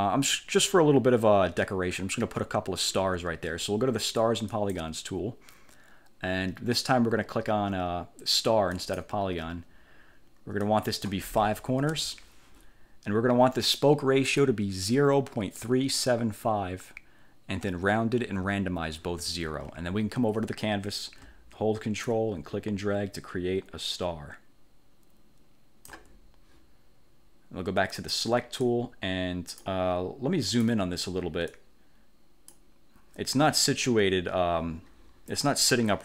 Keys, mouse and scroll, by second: 4.6 click, 8.9 click, 10.7 click, 11.9 5, 22.2-26.2 ctrl+drag, 28.1 click, 28.8 click, 30.6 click, 31.6 click.